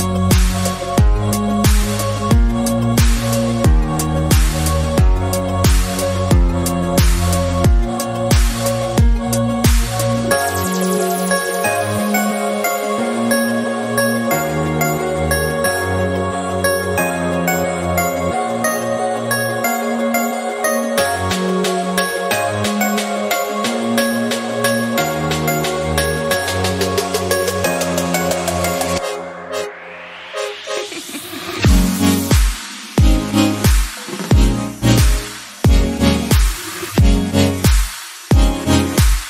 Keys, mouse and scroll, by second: 1.0 ctrl+r, 2.5 s, 3.5 g, 4.9 s, 5.9-6.4 scroll down 1, 6.4 shift+middle click, 6.7-7.3 scroll up 1, 7.3 alt+click, 7.8 s, 8.6 scroll down 2, 8.8 shift+middle click, 9.3 scroll up 3, 9.8-11.3 shift+middle drag, 11.3 alt+click, 12.1 alt+z, 12.8 alt+z, 14.0-15.7 drag, 16.4 s, 17.6-18.7 shift+middle drag, 18.7-19.1 scroll up 2, 19.1-20.3 shift+middle drag, 20.3 alt+click, 21.0 g, 22.0 s, 25.5 alt+click, 26.0 g, 27.9 Tab, 28.5 KP_1, 28.8 scroll up 2, 29.0 shift+middle click, 29.5 Tab, 30.4-32.4 alt+drag, 32.5 scroll down 2, 32.7 middle click, 33.1-34.6 scroll up 1, 34.8 q, 36.4 scroll up 2, 37.8 click, 38.8 KP_1, 39.0-39.2 scroll up 1.